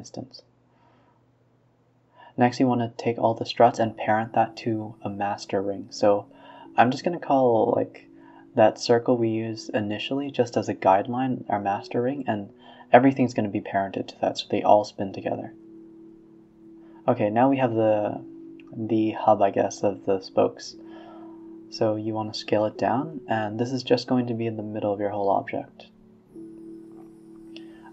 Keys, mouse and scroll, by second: 0.0 shift+click, 0.5 shift+click, 1.1 ctrl+p, 2.0-2.6 middle drag, 2.6 a, 3.0 click, 3.6-4.3 scroll down 16, 4.3 scroll up 6, 4.6-5.0 scroll down 2, 5.0-6.0 scroll up 11, 6.0 click, 6.3 x, 6.8 click, 7.1 r, 8.5 KP_1, 8.8 KP_3, 9.3 r, 10.1 middle click, 10.5 r, 13.0-14.0 middle drag, 14.0 a, 14.1 a, 14.3-15.0 middle drag, 15.0 shift+a, 18.4 r, 19.9 r, 20.6 s, 22.7 middle click, 23.1 s, 24.7-26.1 middle drag, 26.1 Tab, 26.2 scroll up 2, 26.5 middle drag, 26.6 scroll down 2, 26.8-27.5 middle drag, 27.5 scroll up 1, 27.7 middle drag.